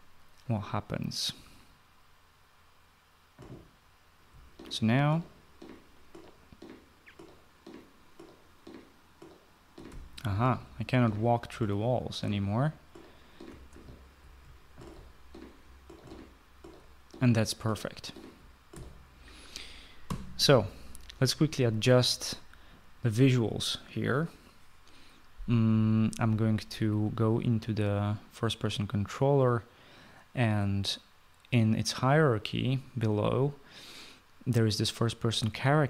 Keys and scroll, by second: 4.2-19.2 typing, 20.0 Escape.